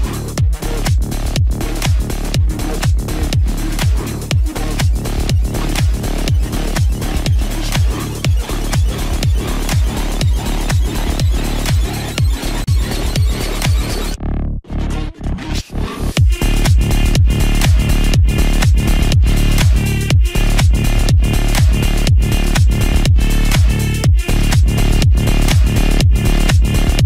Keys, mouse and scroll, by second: 12.8 click, 14.0-17.4 drag, 18.2-19.4 drag, 19.4 ctrl+j, 20.4 click, 22.6 ctrl+=, 23.9 space, 24.5 click, 24.7 space, 25.9 click.